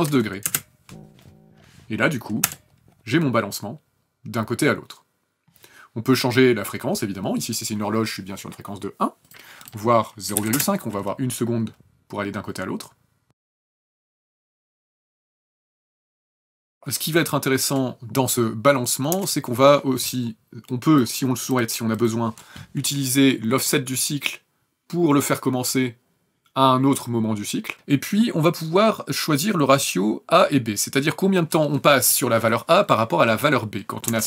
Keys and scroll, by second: 0.4 KP_Enter, 2.4 KP_0, 10.3 KP_Decimal, 10.4 KP_5, 10.6 KP_Enter, 13.3 KP_0, 19.1 KP_0, 34.1 KP_0.